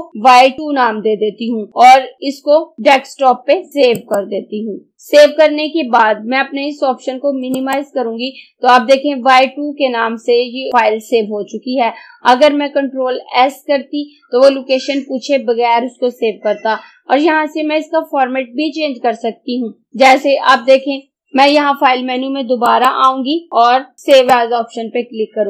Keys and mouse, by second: 0.3 y, 4.0 click, 7.6 click, 19.9 click, 22.7 click, 24.2 click.